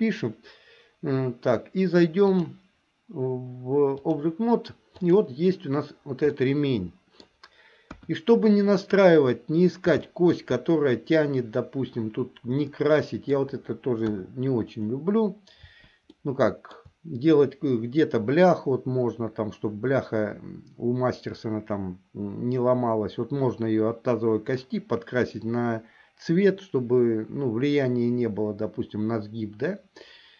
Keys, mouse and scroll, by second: 2.4-4.3 drag, 5.1 click, 6.5-7.6 middle drag, 8.1 KP_1, 10.2 middle click, 12.7 middle click, 14.2 KP_1, 16.2 middle click.